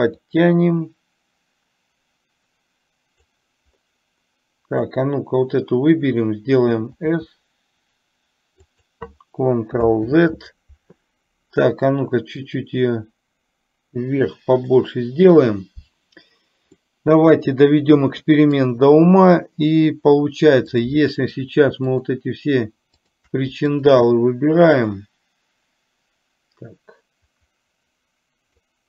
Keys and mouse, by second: 0.5-3.5 drag, 5.0 click, 7.1 s, 10.2 ctrl+z, 12.6 click, 13.1-14.8 drag, 17.0-18.6 middle drag, 20.8 click, 22.0 shift+click, 23.1 shift+click, 23.8 shift+click, 25.0-28.7 drag.